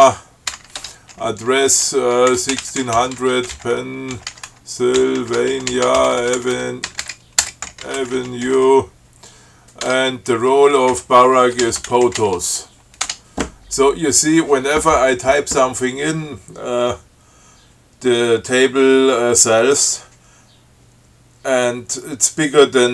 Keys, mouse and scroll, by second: 0.0-0.8 typing, 1.0 shift+Tab, 2.3-9.3 typing, 10.1 Tab, 11.2-12.9 typing, 13.3 Tab.